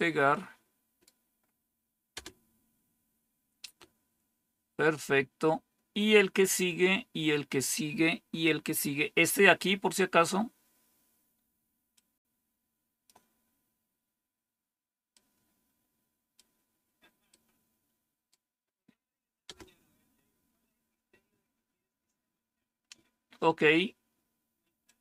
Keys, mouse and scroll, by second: 2.1 Return, 5.3-7.2 scroll down 1, 7.2-8.7 scroll down 1, 8.7 scroll down 1, 11.9-12.9 drag, 15.0-16.2 right drag, 17.2-18.2 right drag, 19.3 Return, 22.0-22.9 scroll down 1, 22.9 scroll down 1, 24.7 click.